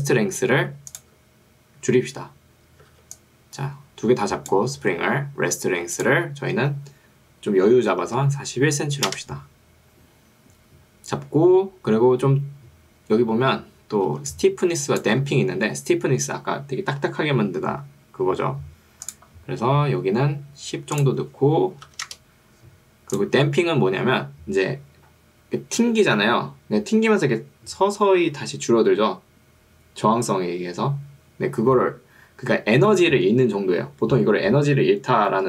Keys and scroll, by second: 3.0 ctrl+2, 4.8 Escape, 9.2 Return, 14.2 ctrl+2, 15.2 Escape, 21.8 1, 22.0 0, 22.2 Return.